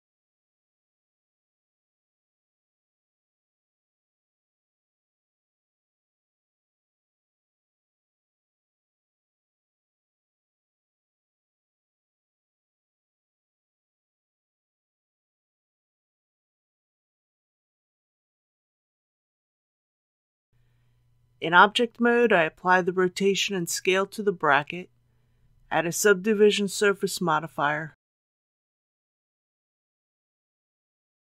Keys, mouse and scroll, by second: 0.0-0.3 typing, 1.0 middle click, 1.6 typing, 3.3 click, 4.5-7.2 typing, 9.2 click, 9.6 KP_3, 10.0 scroll down 1, 10.7-14.4 typing, 14.9 click, 18.0-18.7 typing, 19.9 click, 20.8 Tab, 22.4 ctrl+a, 23.9 click.